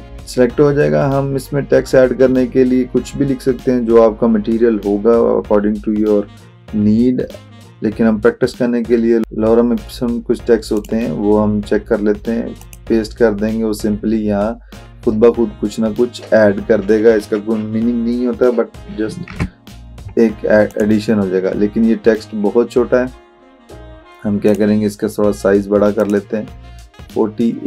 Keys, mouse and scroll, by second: 10.8 click, 19.3 ctrl+a, 20.7 click, 24.5-27.6 drag.